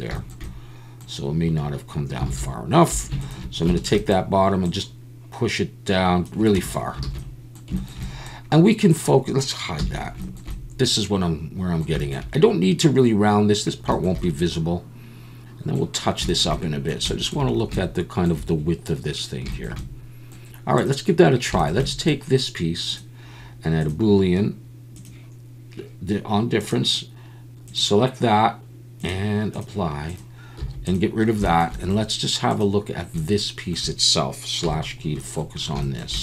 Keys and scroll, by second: 2.3 alt+a, 2.9 2, 6.6 Tab, 7.0 alt+a, 9.8 h, 30.6 x, 34.6 /.